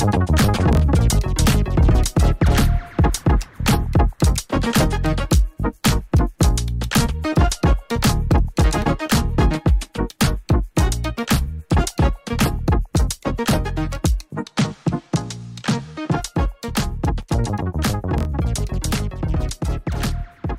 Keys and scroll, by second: 1.5 ctrl+z, 8.1 ctrl+z, 8.5 ctrl+z, 14.7 2, 14.9 Return.